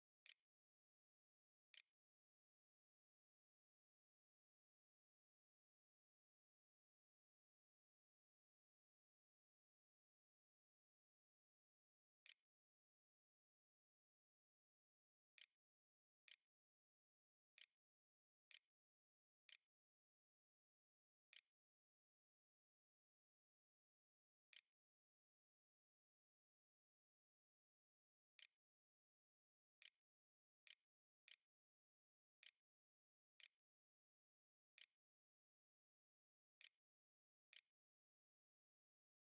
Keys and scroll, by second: 0.3-1.8 typing, 3.1-3.9 typing, 11.3-24.8 typing, 21.1 Tab, 26.9-36.4 typing, 36.9 ctrl+z, 37.3 ctrl+s, 37.9-38.7 typing.